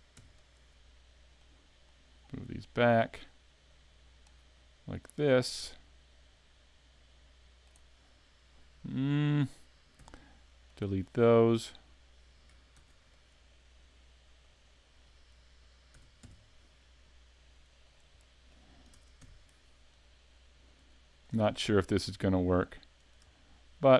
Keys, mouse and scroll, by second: 0.2 e, 0.5 click, 1.4 click, 9.1 middle click, 10.0 x, 11.0 scroll up 4, 11.5 shift+middle click, 12.8 ctrl+r, 14.7 click, 15.9 s, 17.9 click, 18.2 middle click, 18.9 ctrl+Tab, 19.9 right click, 20.6 right click, 21.0 shift+right click, 21.5 middle click, 22.5 shift+right click, 23.0 shift+right click, 23.3 middle click.